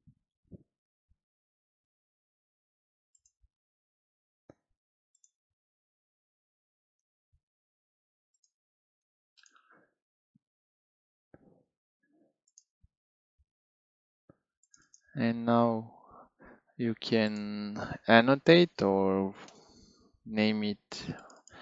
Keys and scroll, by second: 1.1 Page_Up, 2.2 Page_Down, 3.2 End, 18.5 BackSpace, 18.7 1, 19.4 Return.